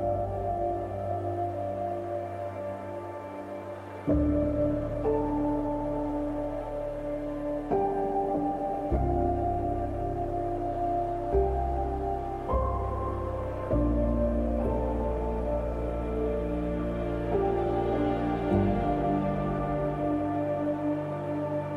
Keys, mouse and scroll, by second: 1.8 scroll down 1, 2.7-4.4 scroll up 1, 6.7 scroll up 1, 7.8 space, 8.0 click, 8.3 space, 9.5 click, 11.6 click, 11.8 right click, 12.3 click, 13.6 scroll up 1, 14.0-14.9 typing, 14.5 click, 15.1 click, 19.1 typing, 19.2 click.